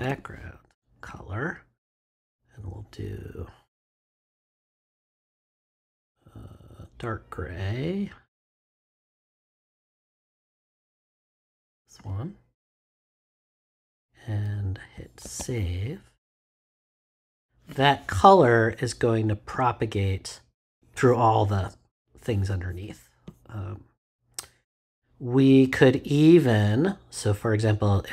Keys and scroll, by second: 0.0-0.5 typing, 15.2 super+s.